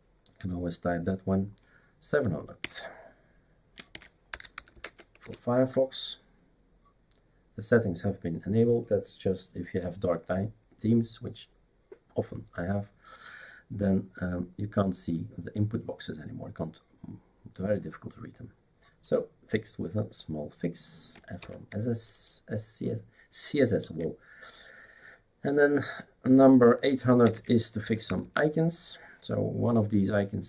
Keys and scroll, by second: 2.6 typing, 3.7-5.2 typing, 21.4 typing, 27.2-28.7 typing.